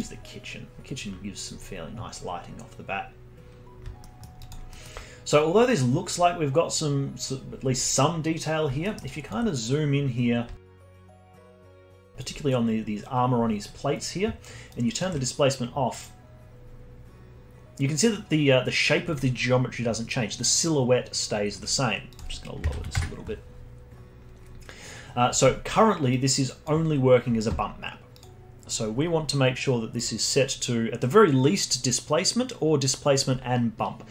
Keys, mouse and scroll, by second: 4.0-4.4 alt+middle drag, 4.4 alt+click, 4.7 alt+middle click, 5.2 scroll up 2, 8.3 scroll up 2, 8.8 alt+middle click, 9.0 alt+click, 9.5 scroll up 2, 10.1 scroll up 1, 10.5 alt+middle click, 10.8 alt+click, 12.3-14.7 drag, 14.7 ctrl+right click, 22.1-24.8 drag, 24.8-26.1 scroll down 1, 26.1 drag, 28.1 click, 28.7-29.5 scroll down 26, 29.9-33.0 drag.